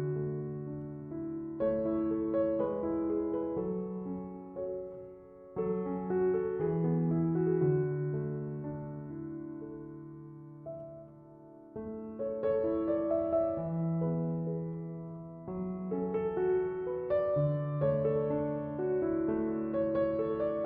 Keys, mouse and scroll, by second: 6.4 Escape, 9.3 Escape, 19.2 7, 19.7 ., 19.9 5, 20.2 Return.